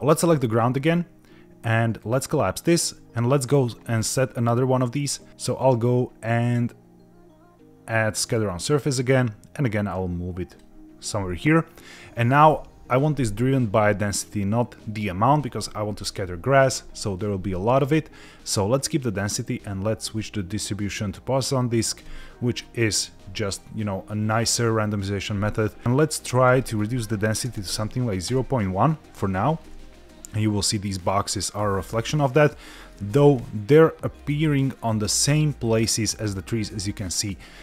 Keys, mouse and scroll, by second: 2.0 click, 5.5-8.7 drag, 9.8-10.5 drag, 22.1 click, 26.5-28.4 drag, 29.5-30.8 scroll down 3, 31.1-31.8 scroll up 2, 31.9-32.9 middle drag, 33.3-34.1 middle drag.